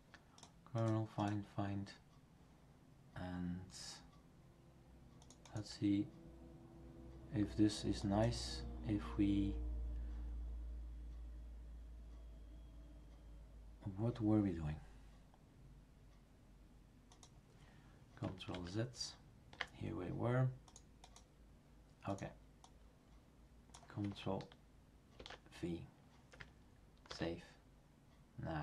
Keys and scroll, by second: 18.5 ctrl+z, 25.2 ctrl+v, 27.1 ctrl+s.